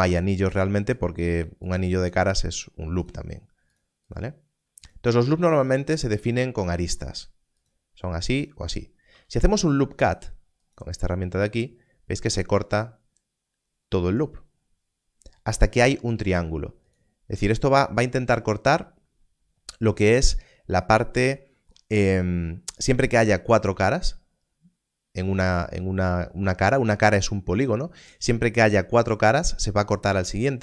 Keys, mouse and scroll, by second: 0.3 alt+click, 2.9 alt+click, 4.8 alt+click, 5.6 alt+click, 7.5 alt+click, 8.4 alt+click, 9.1 alt+a, 10.6 click, 21.0 click.